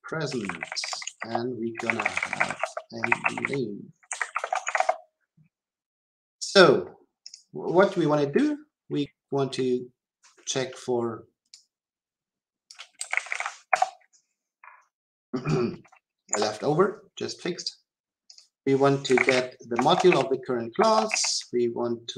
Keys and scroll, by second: 13.7 Return, 19.8 Return.